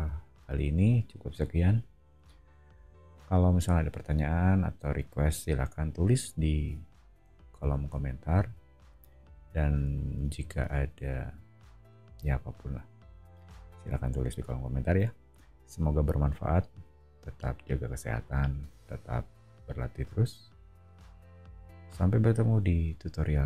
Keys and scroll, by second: 7.5 super+[.